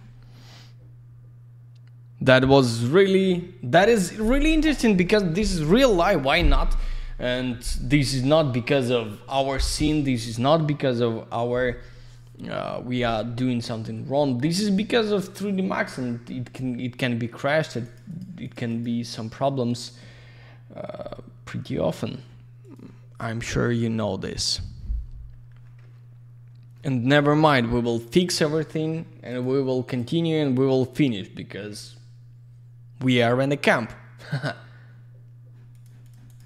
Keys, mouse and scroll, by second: 17.3 click, 17.4 click, 17.5 click, 17.6 double click, 17.8 click, 17.9 click, 18.0 click, 18.1 double click, 18.4 click, 18.5 click, 18.6 click, 18.7 double click, 22.5 click, 22.7 click, 29.2 click, 29.3 click, 29.8 click, 29.9 click, 30.3 click, 30.5 click, 35.7 click, 35.8 click, 36.0 click, 36.0 double click, 36.2 click, 36.3 click, 36.4 click.